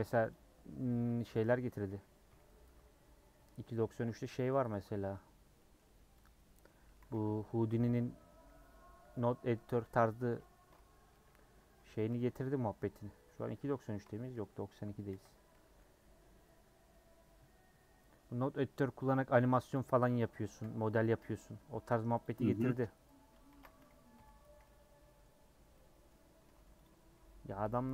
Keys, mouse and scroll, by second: 0.1 3, 0.3 click, 1.4 alt+click, 2.2 ;, 3.8 3, 4.1 click, 4.7 middle click, 5.3 scroll down 1, 5.5 middle click, 6.2 click, 6.6 middle click, 7.0 a, 7.9 u, 10.5 Tab, 11.1 /, 11.7 /, 15.1 h, 15.5 middle click, 15.9-17.4 scroll down 2, 19.8 click, 20.6 /, 21.0 middle click, 21.2 Tab, 24.1 ;, 24.6 middle click, 25.4 scroll up 1, 25.7 scroll down 1, 25.7 middle click, 26.1-26.4 scroll up 2, 26.4 3, 27.6 ;.